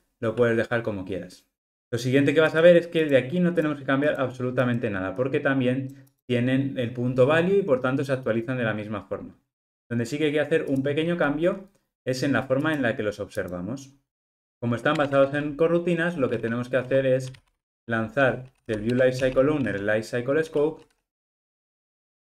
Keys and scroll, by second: 19.0 Return.